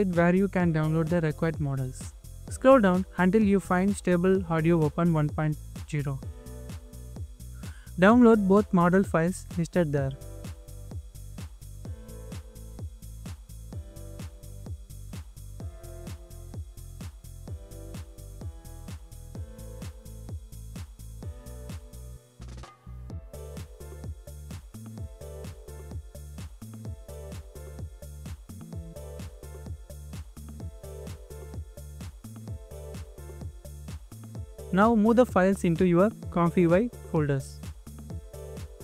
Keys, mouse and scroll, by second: 2.9 scroll down 1, 17.5-18.2 scroll down 1, 22.1 scroll down 1, 23.8 scroll down 1.